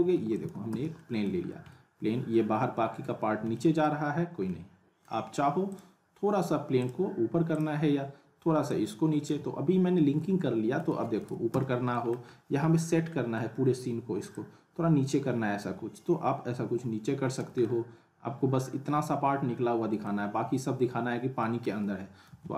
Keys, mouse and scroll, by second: 0.1 alt+w, 0.3 alt+right click, 0.4 alt+w, 0.7 z, 1.0 alt+middle click, 1.4-1.7 scroll up 2, 1.7-3.3 alt+middle drag, 3.2 scroll up 1, 3.5 alt+middle click, 4.1 scroll down 1, 4.4-5.1 alt+middle click, 5.7-9.3 drag, 10.3-11.0 middle click, 11.2 ctrl+z, 11.9 middle click, 12.7-13.1 scroll up 1, 13.1 middle click, 17.6-20.1 alt+middle drag, 20.3 scroll up 1, 20.6-21.9 alt+middle drag, 22.3 ctrl+z.